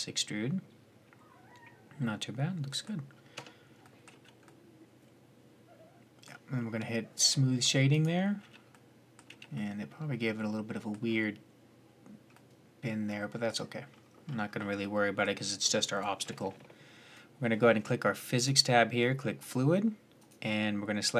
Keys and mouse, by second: 0.1 middle click, 1.4 middle click, 1.8 middle click, 2.0 middle click, 3.1 Tab, 3.2-3.6 middle drag, 3.9 z, 7.7-8.2 drag, 8.2 z, 8.6-9.5 middle drag, 9.1 z, 9.9-10.4 middle drag, 12.7 middle click, 12.9-13.8 middle drag, 14.2-14.7 middle drag, 17.9-21.1 drag.